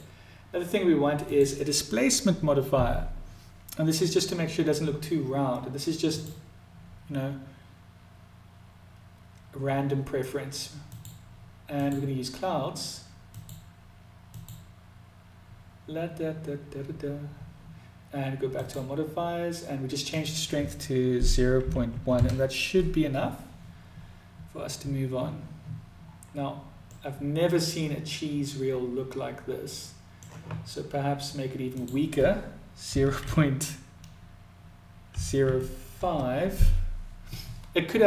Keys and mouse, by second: 5.6 click, 10.6-11.8 drag, 12.9-16.8 drag, 18.1 click, 19.7-24.8 drag, 26.5-29.8 middle drag, 31.4-38.0 drag.